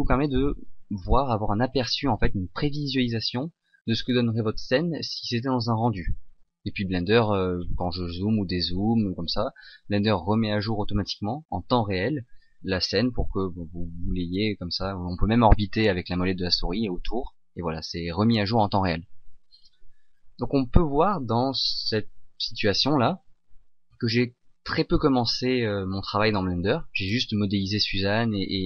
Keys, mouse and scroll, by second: 7.9-8.8 scroll down 1, 8.8-10.8 scroll up 1, 16.0 middle click.